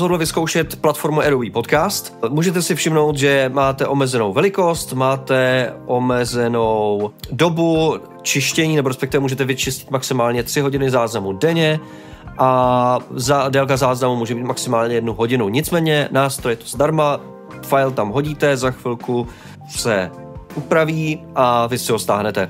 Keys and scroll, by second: 0.7 typing.